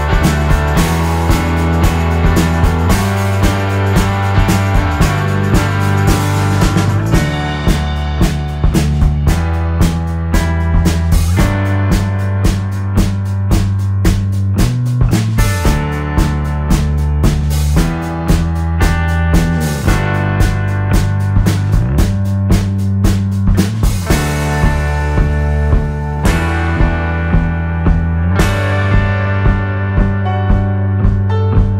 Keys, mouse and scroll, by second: 1.6 z, 1.7 click, 2.1 F2, 2.4 click, 2.9 click, 3.9 click, 5.0 click, 5.8 click, 7.1 click, 7.6 click, 8.7 click, 9.6 KP_Subtract, 10.1 F6, 10.3 click, 11.1-14.0 shift+drag, 14.2 shift+F2, 14.5-16.8 shift+drag, 16.9-18.7 shift+drag, 18.9 shift+click, 19.5-20.5 shift+drag, 21.5 click, 21.9 click, 22.9 KP_Subtract, 23.7 F1, 24.1 click, 24.7 middle click, 25.9 click, 27.7 click, 28.6 click, 29.0 click, 30.0 click.